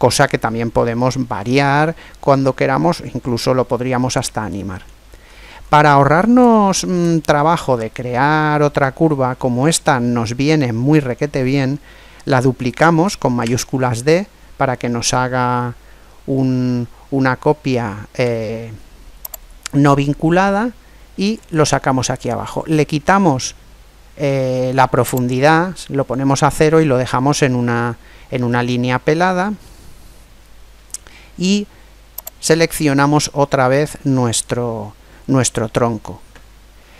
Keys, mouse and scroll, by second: 3.2-8.9 middle drag, 9.1-11.2 middle drag, 13.2 shift+d, 19.2 click, 25.1 click, 27.2-29.0 middle drag, 32.2 right click, 34.0-35.3 middle drag.